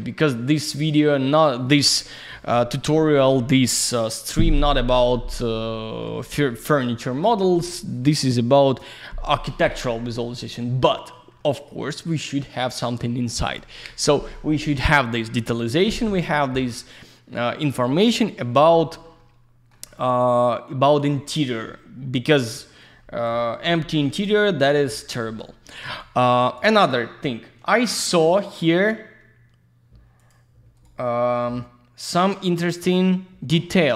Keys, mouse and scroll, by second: 0.4 scroll down 1, 0.8 alt+middle click, 5.7 alt+middle click, 6.1 alt+z, 6.2 click, 6.9 F4, 10.8 middle click, 12.0 middle click, 18.8-19.1 scroll down 1, 19.2 alt+middle click, 21.0 alt+z, 21.1 click, 22.5 alt+z, 22.8 click, 23.6 middle click, 24.1 alt+z, 24.2 click, 25.0 click, 25.1 click, 25.4 middle click, 25.9 alt+z, 26.0 click, 27.0 scroll up 1, 27.9 click, 28.0 click, 30.2 click, 30.3 click, 30.8 right click, 32.7 click, 32.8 click.